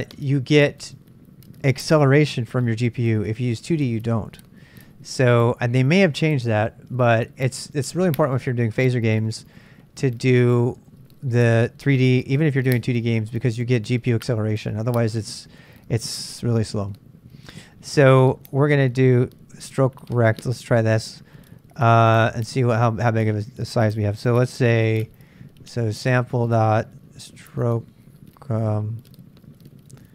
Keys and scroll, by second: 22.2 super+Tab, 25.7-30.1 typing.